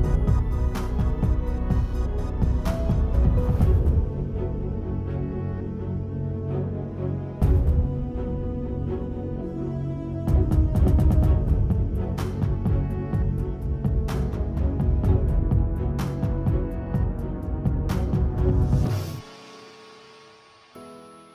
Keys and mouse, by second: 1.4 click, 2.2 f, 2.5 click, 3.1 click, 3.6 ctrl+z, 3.7 f, 4.1 click, 4.4 ctrl+z, 4.6 click, 5.1 alt+click, 5.3 click, 5.6 ctrl+z, 5.7 click, 6.3 alt+click, 6.6 alt+click, 7.5 click, 8.1 click, 8.4 ctrl+z, 8.6 click, 8.8 ctrl+z, 9.1 click, 9.7 click, 10.3 click, 10.7 ctrl+z, 10.8 ctrl+z, 11.6 click, 12.0 shift+click, 12.4 shift+click, 12.7 shift+a, 13.3 click, 13.9-15.2 drag, 15.6-18.7 typing, 17.1 ctrl+2, 19.1 right click, 20.1 alt+click, 20.5 r.